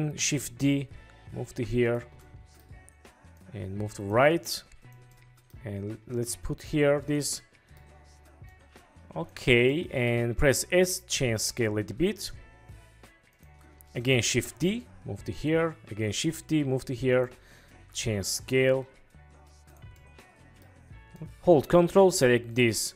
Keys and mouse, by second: 0.3 shift+d, 2.0 click, 2.5 click, 5.3-5.7 drag, 7.6-7.9 drag, 9.9 click, 10.6 s, 13.4 click, 14.4 shift+d, 15.5 click, 16.2 shift+d, 17.2 click, 17.8 s, 20.2-20.8 drag.